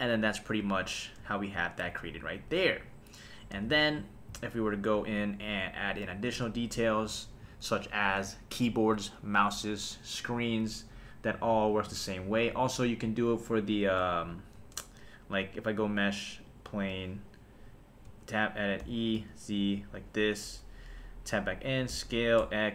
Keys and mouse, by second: 0.0 click, 3.2 click, 3.6 super+s, 14.3 shift+right click, 14.5 shift+a, 18.1 Tab, 18.8 e, 19.2 z, 19.9 click, 20.4 Tab, 21.9 s, 22.4 x.